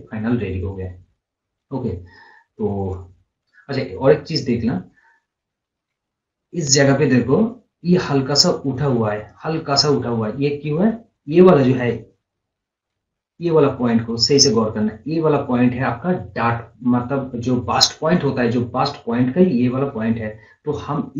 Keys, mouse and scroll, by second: 2.9 click, 5.2-5.5 scroll down 1, 5.6 scroll up 1, 8.4-11.6 drag, 13.4-16.5 drag.